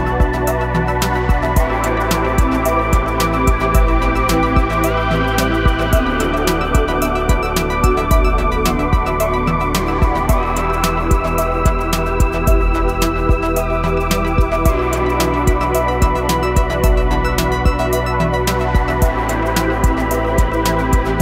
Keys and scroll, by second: 0.6 |, 6.5 g, 11.7 Tab, 12.9 KP_1, 19.9 Tab.